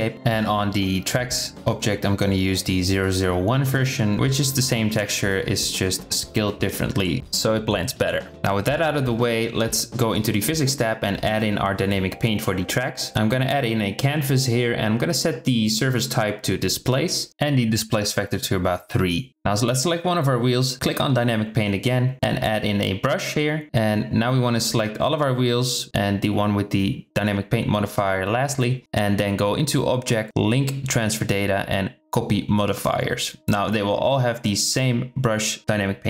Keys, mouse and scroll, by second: 2.3-4.0 drag, 10.8 click, 12.5 click, 14.4-16.4 drag, 16.8-19.2 drag, 21.7 click, 22.6-23.5 drag, 23.8-24.1 drag, 25.2-25.7 middle drag, 25.8 click, 26.4 shift+drag, 26.8-27.2 middle drag, 27.5 shift+drag, 28.0 shift+click, 28.4 shift+click, 31.0-34.6 drag, 35.6 click.